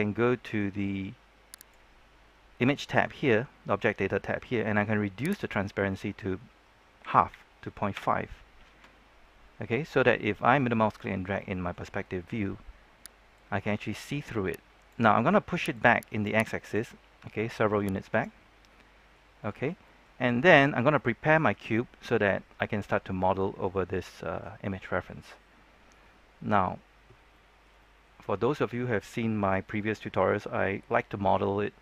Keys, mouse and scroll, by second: 1.5 click, 7.0 KP_Decimal, 7.2 KP_5, 10.5-11.9 middle drag, 11.9 scroll up 1, 12.1 middle click, 13.3-18.3 drag, 18.3-18.6 scroll down 1, 18.6 middle click, 20.6 scroll up 1, 20.9-23.7 middle drag, 26.0-26.4 scroll up 1, 26.4-27.1 scroll down 1, 27.3-30.8 shift+middle drag.